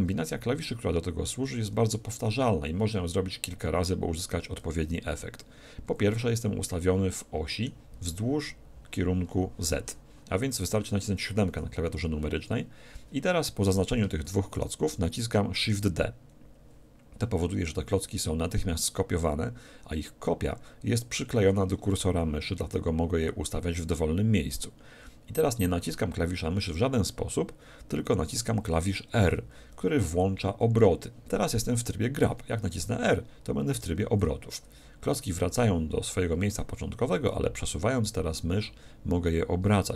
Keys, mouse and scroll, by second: 0.3-2.3 middle drag, 6.8-8.8 middle drag, 11.5 KP_7, 13.7-16.2 right drag, 15.6 shift+d.